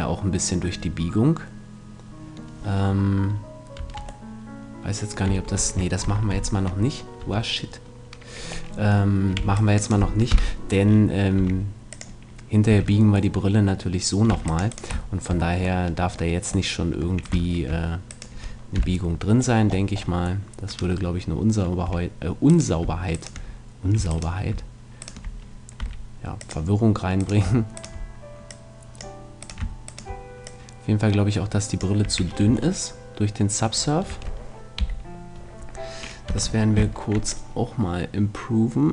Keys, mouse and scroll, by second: 3.8 Tab, 5.3 Tab, 6.0 ctrl+z, 6.3 ctrl+z, 7.2 Tab, 9.4 c, 9.9-11.4 middle drag, 10.3 KP_7, 11.4 e, 12.0-13.3 drag, 12.7 a, 13.3 middle click, 14.3 c, 14.8-16.4 middle drag, 18.1 middle click, 18.8 KP_Decimal, 22.5-26.7 right drag, 25.8 s, 26.5-28.3 drag, 27.2-29.0 right drag, 28.6 click, 30.4 right click, 31.5 right click, 32.0 a, 32.5 Tab, 34.1 Tab, 34.8 KP_3, 36.3 z, 36.8 b.